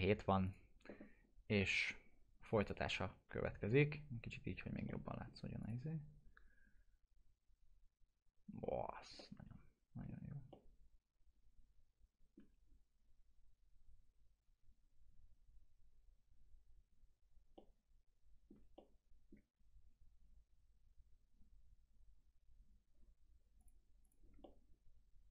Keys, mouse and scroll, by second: 3.8-4.7 alt+middle drag, 5.6 alt+click, 9.1 alt+click, 9.2-10.1 alt+middle drag, 10.5-12.4 alt+middle drag, 17.2 alt+middle click, 17.5-18.5 alt+middle click, 18.7-19.4 middle drag, 23.6 click, 24.4-25.3 alt+middle drag.